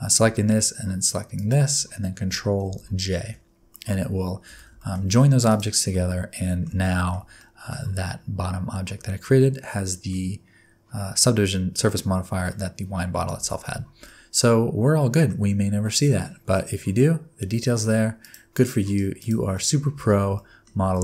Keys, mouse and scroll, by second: 1.3 shift+click, 2.9 ctrl+j, 3.7 middle click, 4.0-5.5 scroll down 7, 4.5 alt+a, 4.8 shift+middle click, 5.5 click, 5.9 middle click, 6.8 shift+middle click, 7.4 middle click, 7.8-8.5 scroll up 5, 9.4 middle click, 12.5 middle click, 13.5 shift+middle click, 13.7-14.7 scroll down 4, 14.0 middle click, 15.8-16.1 scroll up 2, 16.5 middle click, 17.9-18.2 scroll up 2, 18.2 click, 18.6 middle click, 18.9 scroll down 1, 19.2 click, 19.5 middle click, 20.0 Tab, 20.3 middle click, 20.8 alt+z, 20.8 alt+scroll down 1.